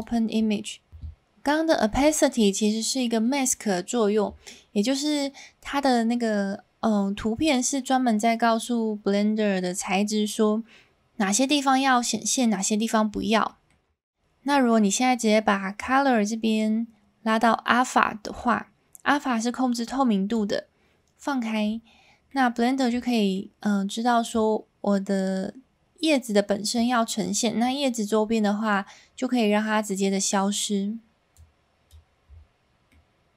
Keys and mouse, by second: 4.8 middle click, 13.6 middle click, 14.6 middle click, 15.8-20.3 drag, 22.2 middle click, 23.3 middle click, 24.3-26.7 drag, 31.3 click, 32.9-33.3 middle drag.